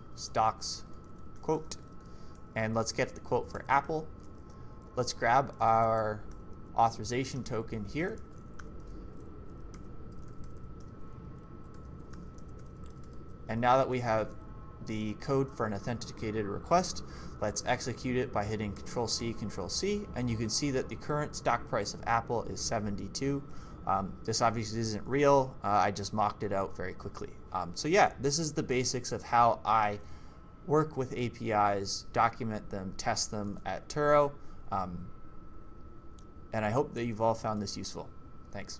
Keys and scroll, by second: 0.0-4.9 typing, 7.1-11.7 typing, 7.8 Escape, 13.1 typing, 18.7 ctrl+c.